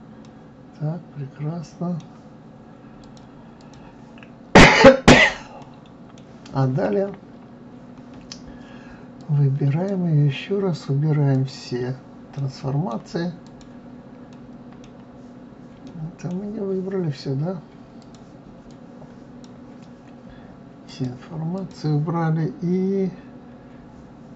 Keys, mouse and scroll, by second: 0.2-3.0 middle drag, 3.0 click, 3.6 click, 5.5 scroll up 1, 5.6-8.1 middle drag, 8.1-9.2 scroll down 2, 9.2 click, 11.3 click, 12.4-13.4 middle drag, 13.4 click, 14.3-18.0 middle drag, 18.0 click, 18.7 click, 20.9 click.